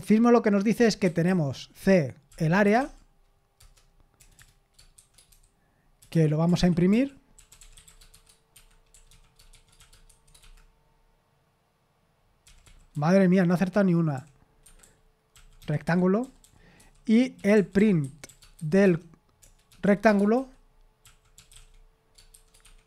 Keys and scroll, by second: 10.3 typing, 18.3-22.8 typing.